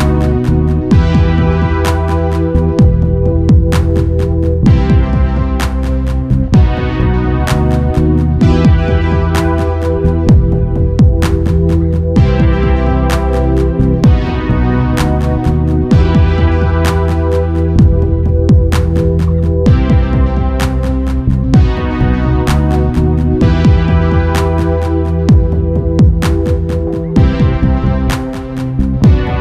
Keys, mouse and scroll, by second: 16.9 alt+a, 19.5-21.4 drag, 19.9 Escape, 26.5 middle click.